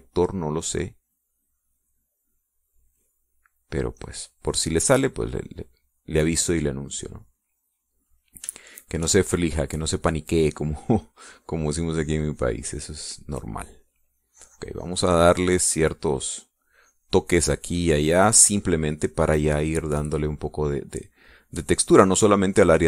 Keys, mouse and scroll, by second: 0.1-8.0 drag, 8.4 middle click, 9.5 shift+click, 11.4-17.5 drag, 17.6-19.7 drag, 19.8 click, 20.7-21.9 drag, 21.9 middle click, 22.5-22.8 drag.